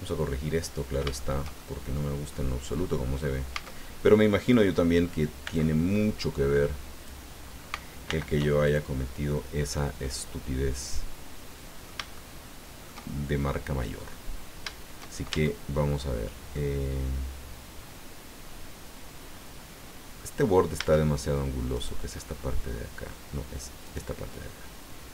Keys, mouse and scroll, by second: 1.1-2.5 shift+drag, 3.5 a, 5.4 b, 5.5-7.2 drag, 8.0 alt+m, 8.6 alt+click, 10.0-12.0 drag, 12.1-14.1 shift+drag, 15.3 shift+Tab, 16.5-20.3 middle drag, 20.7 Tab, 21.7 right click, 22.1-23.3 middle drag, 23.8 right click.